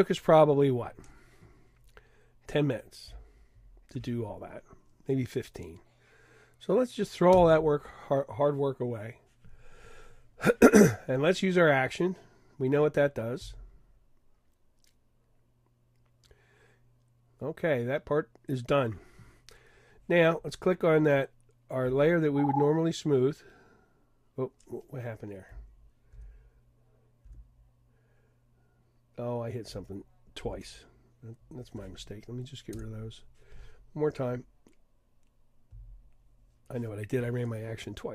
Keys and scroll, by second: 26.1 super+z.